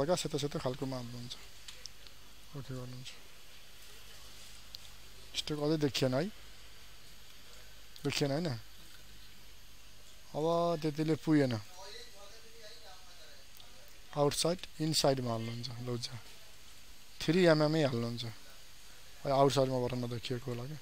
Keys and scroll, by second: 4.6 ctrl+d, 8.9 ctrl+a.